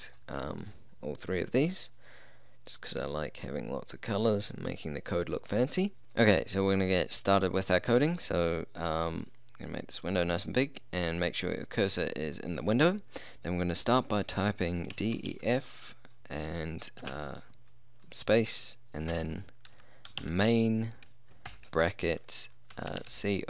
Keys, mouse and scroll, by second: 9.2-11.4 middle drag, 14.9 d, 15.2 e, 15.3 f, 17.1 space, 19.2 m, 19.8 a, 20.1 i, 20.2 n, 21.5 shift+9, 22.7 c, 22.9 o, 23.1 n, 23.2 t.